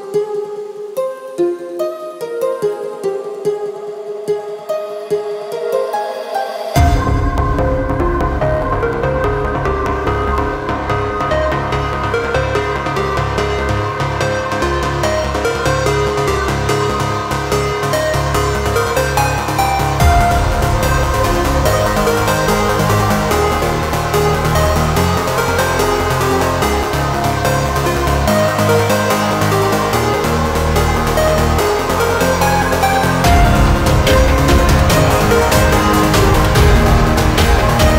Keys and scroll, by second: 15.2 ctrl+z.